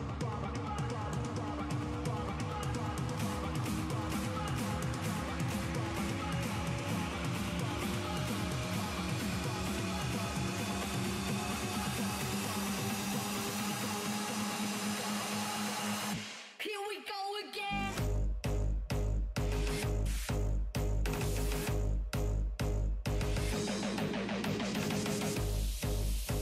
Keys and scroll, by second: 0.2 s, 7.4 s, 7.8 s, 9.5 s, 10.0 s.